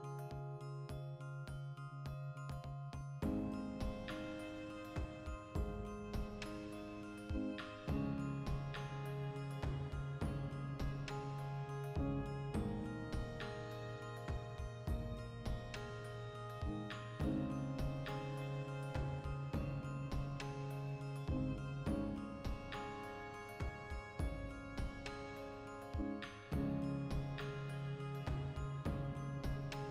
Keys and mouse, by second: 0.1-4.3 ctrl+middle drag, 0.2 a, 4.3 right click, 4.6 Tab, 4.8-5.9 shift+middle drag, 5.9 alt+q, 6.2 Tab, 6.5 shift+middle click, 7.7 shift+s, 8.2 shift+a, 9.2 ctrl+middle click, 9.4 shift+middle click, 9.7 Tab, 10.0 a, 10.2 v, 11.2 g, 11.8 Return, 12.0 o, 13.8 ctrl+click, 14.0-16.1 shift+middle drag, 16.1 g, 17.3 click, 17.5 right click, 18.2 ctrl+i, 19.0 x, 19.5 right click, 19.9 e, 20.4 click, 22.4 click, 23.0 ctrl+shift+middle click, 23.9 g, 24.3 click, 24.6 alt+q, 25.3 right click, 25.3 a, 25.5-27.5 shift+middle drag, 25.7 g, 27.5 shift+click, 27.9 alt+q, 28.6 ctrl+shift+middle click, 29.2 right click, 29.7 e.